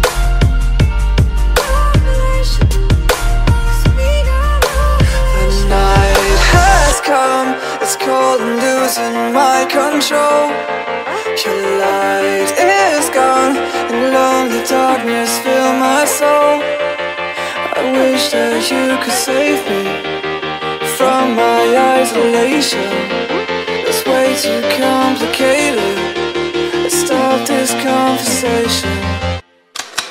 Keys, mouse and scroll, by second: 0.5 click, 2.6 click, 3.4 alt+click, 5.5 click, 6.3 alt+click, 6.9 click, 7.0 click, 8.3 click, 9.1 alt+click, 11.4 click, 11.8 ctrl+alt+z, 13.8 click, 14.5 alt+click, 15.1 click, 17.2 click, 18.1 alt+click, 18.5 ctrl+click, 21.7 click, 22.7 alt+click, 25.2 click, 27.9 ctrl+click, 28.0 ctrl+space, 28.3 alt+click, 29.0 click.